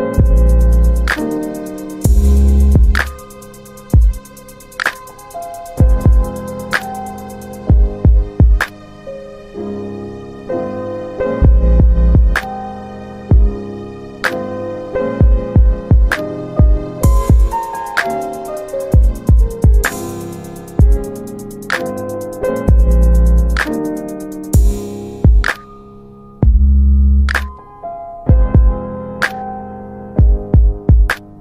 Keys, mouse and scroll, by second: 0.2 middle click, 1.2 middle click, 2.0 click, 5.0 alt+w, 6.5 middle click, 6.6 scroll down 3, 7.1 scroll up 3, 9.1 r, 10.9 click, 16.0 click, 17.3 click, 18.9 alt+w, 19.2 alt+w, 19.9 alt+middle click, 21.7 click, 23.4 alt+middle click, 24.4 click, 24.9 double click, 25.8 alt+middle click, 26.5 click, 29.6 click.